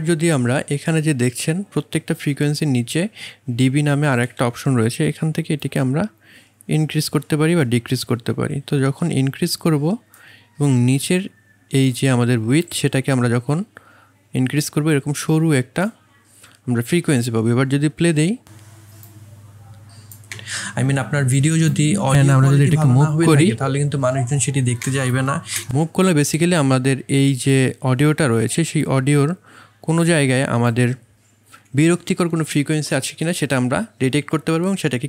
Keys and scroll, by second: 20.3 space, 24.8 space, 25.5 space.